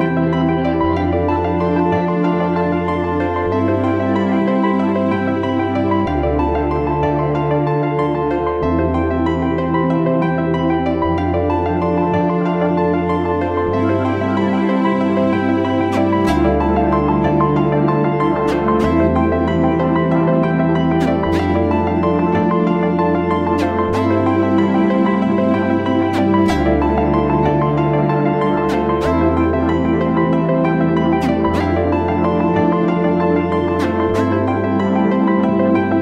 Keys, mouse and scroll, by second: 11.9 shift+click, 13.4 ctrl+g, 13.9 double click, 14.5-16.1 typing, 20.0 double click, 24.8 Down, 24.9 Down, 25.1 Down, 29.0 right click, 30.8 right click.